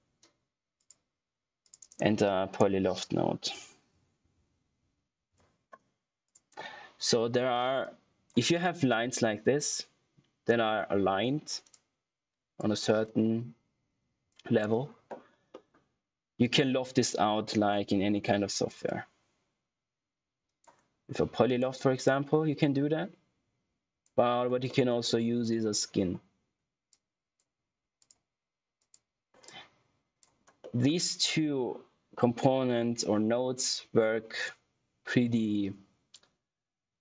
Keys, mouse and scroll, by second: 0.7 click, 1.8 right click, 3.2-5.2 typing, 6.2 click, 12.0 click, 15.4 middle click, 18.8 click, 24.6 middle click, 26.8 click, 30.5 middle click, 33.6 click.